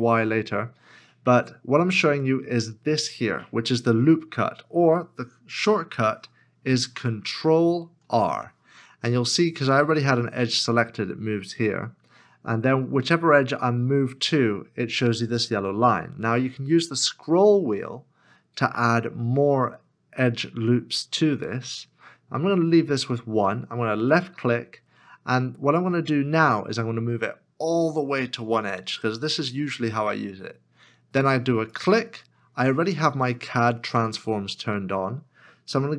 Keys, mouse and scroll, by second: 0.0-0.8 scroll up 1, 8.0 ctrl+r, 18.1-19.0 scroll up 1, 19.0-19.5 scroll down 1, 19.8-20.8 scroll up 1, 20.8-21.5 scroll down 1.